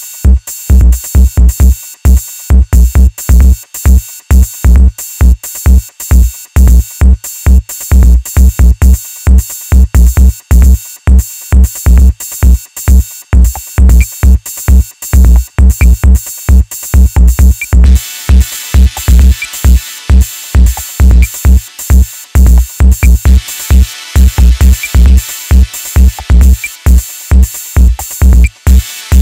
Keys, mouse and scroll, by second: 0.0 KP_1, 0.4 KP_1, 1.5 click, 2.3-2.7 scroll down 2, 2.7-5.7 middle drag, 6.7-8.8 drag, 8.8 KP_1, 9.2 scroll up 1, 9.3-10.0 middle drag, 10.0 Tab, 10.5 middle click, 10.9 KP_1, 11.2-11.8 scroll down 1, 11.8-12.5 scroll up 1, 12.5 ctrl+z, 13.5 ctrl+shift+z, 13.8-14.8 ctrl+shift+z, 16.0-18.1 drag, 18.1 KP_1, 18.8-20.2 scroll down 2, 20.2 click, 21.4-22.7 middle drag, 22.7 ctrl+r, 23.9 KP_1, 24.4 middle click, 25.3 KP_1, 25.7 alt+z, 26.5 click, 28.4 click.